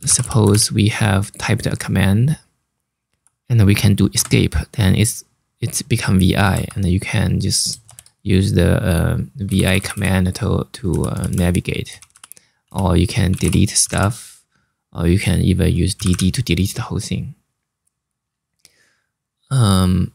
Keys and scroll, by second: 0.0-0.4 typing, 3.9 Escape, 6.2 0, 7.5 shift+4, 9.2-14.1 typing, 15.6 typing.